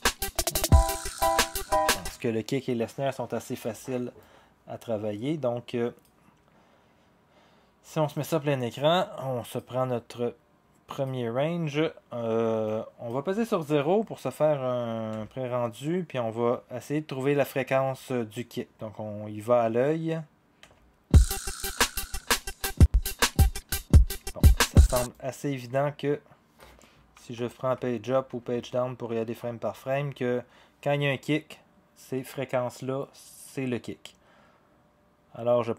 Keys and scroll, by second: 15.1 0, 27.2 Page_Up, 27.4 Page_Up, 27.6 Page_Up, 28.1 Page_Down, 28.4 Page_Down, 28.6 Page_Down, 28.9 Page_Down, 29.2 Page_Up, 29.5 Page_Up, 29.7 Page_Up.